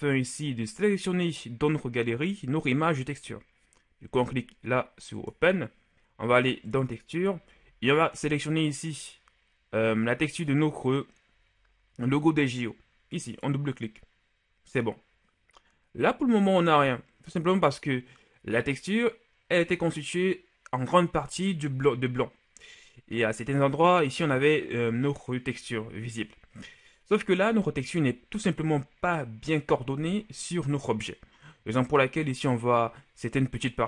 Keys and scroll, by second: 5.9 Return.